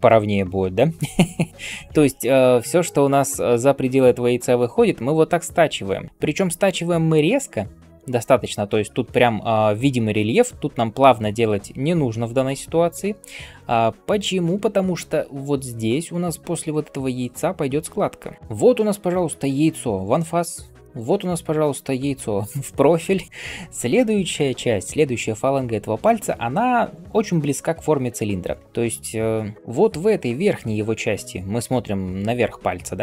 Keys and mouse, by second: 1.1 d, 2.5 [, 14.0 d.